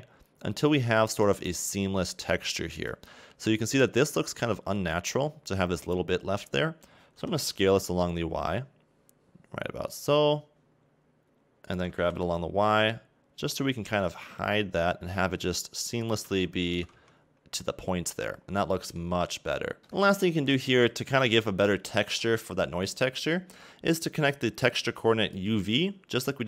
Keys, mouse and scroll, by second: 7.2 s, 12.1 g, 16.8 a, 17.0 Tab, 18.5 scroll down 2, 18.6 middle click, 19.5 scroll up 2, 19.8 click, 21.5-23.4 scroll up 1.